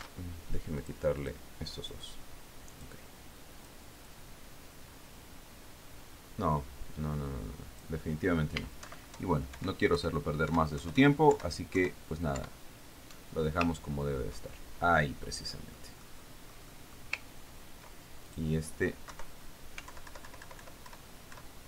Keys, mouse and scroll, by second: 1.4 ctrl+shift+d, 2.3 click, 2.7 click, 4.2 click, 4.9 click, 5.6-9.4 drag, 10.3 alt+Right, 11.4 alt+Left, 12.0 alt+Up, 12.3 alt+Down, 13.8 alt+Up, 15.2-15.8 ctrl+scroll down 2, 15.9 ctrl+middle click, 17.2-18.6 middle drag, 19.8 ctrl+click, 20.6 Right, 21.4 alt+Left.